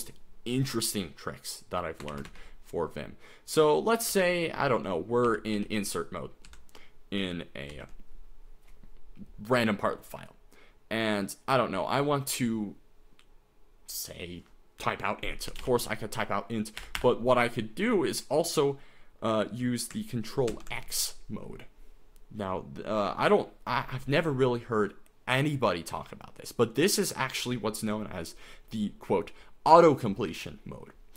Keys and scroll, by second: 2.1 o, 2.3 Escape, 3.7-5.6 typing, 6.5 Right, 7.7 ctrl+t, 15.3-17.0 typing, 20.5 ctrl+x.